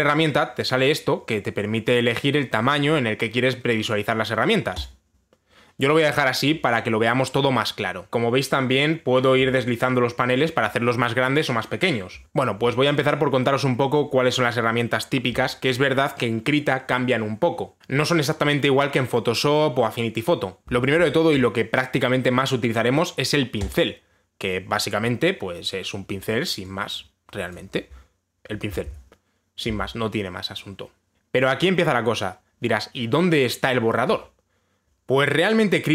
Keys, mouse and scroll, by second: 5.5-8.6 drag, 24.3 click, 28.1 click, 29.5 ctrl+z, 34.9 click.